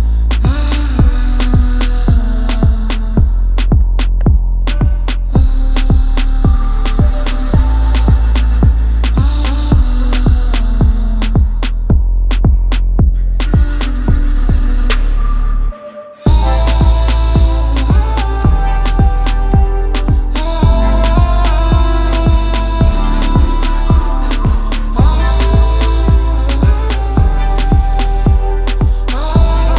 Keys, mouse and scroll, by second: 1.1 shift+click, 1.9 middle click, 2.0 middle click, 2.0 scroll, 2.6 scroll, 3.3 click, 5.8 click, 6.6 middle click, 6.7 middle click, 6.7 middle click, 6.9 middle click, 8.2 click, 8.6 alt+middle click, 9.8 click, 10.6 middle click, 10.7 middle click, 11.0 a, 11.9 click, 12.1 middle click, 12.2 middle click, 12.2 scroll, 13.1 click, 13.2-14.3 scroll, 14.3 click, 14.9 click, 16.7 click, 16.8-17.7 scroll, 17.7 scroll, 19.9 click, 20.2 middle click, 20.2 middle click, 21.9 click, 27.4 click, 27.8-28.6 scroll, 28.7 z, 29.0 click, 29.5 right click.